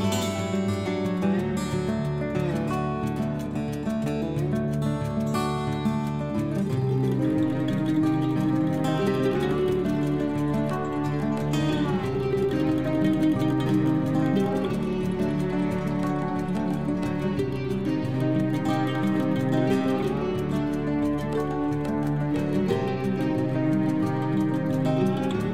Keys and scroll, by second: 0.3 c, 11.2 ctrl+Home.